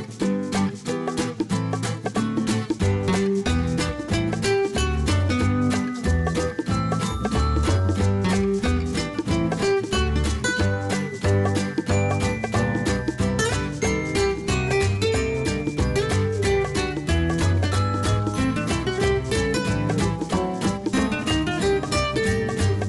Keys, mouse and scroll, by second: 1.2 ctrl+d, 3.3 shift+click, 6.2-7.8 typing, 9.1-11.9 typing, 13.5-15.1 scroll up 1, 15.1 click, 21.2-22.0 scroll down 1, 22.2 click.